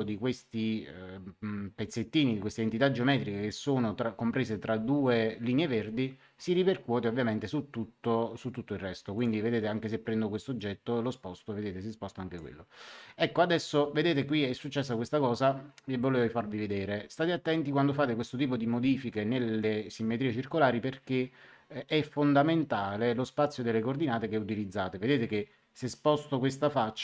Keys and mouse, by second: 9.1 click, 10.5 click.